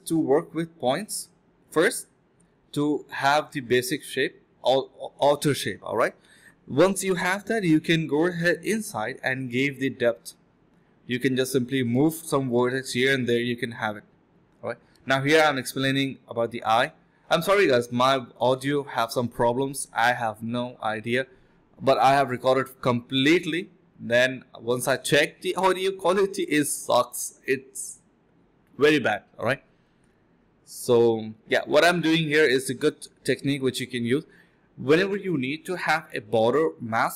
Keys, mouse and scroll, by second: 0.6 double click, 1.0 alt+click, 1.4 ctrl+click, 1.5 alt+click, 1.9 ctrl+alt+shift+click, 2.7 alt+c, 2.8 ctrl+shift+q, 3.0 f, 3.5 alt+click, 3.8 alt+click, 4.4 shift+f, 5.6 F1, 5.7 F11, 6.0 alt+click, 7.4 alt+click, 7.7 1, 9.5 alt+click, 9.7 alt+click, 11.2-11.7 scroll down 2, 11.4 middle click, 11.7 middle click, 11.9 scroll up 1, 12.5 scroll down 1, 12.6 middle click, 12.8 scroll up 1, 13.0 middle click, 15.9 alt+click, 16.2 alt+right click, 16.8 alt+right click, 16.9 alt+right click, 17.0 alt+right click, 20.6 f, 21.6 alt+click, 22.6 ctrl+shift+click, 22.9 ctrl+shift+z, 23.1 ctrl+shift+click, 23.6 ctrl+shift+click, 24.5 ctrl+click, 24.7 ctrl+z, 25.9 shift+click, 26.2 shift+click, 30.6 ctrl+alt+click, 30.8 ctrl+z, 33.1 ctrl+z, 33.7 ctrl+alt+click, 34.2 ctrl+alt+click.